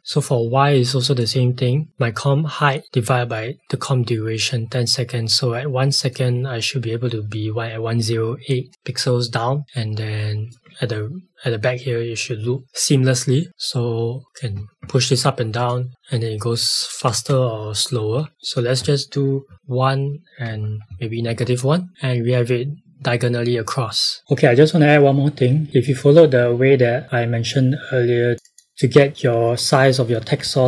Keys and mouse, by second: 0.0 click, 5.8 click, 10.6 space, 14.2 click, 14.5 Up, 15.5 click, 17.1 space, 18.4 click, 19.4 KP_1, 19.5 Tab, 20.5 KP_Subtract, 20.9 KP_1, 21.2 KP_Enter, 21.9 space, 24.2 click.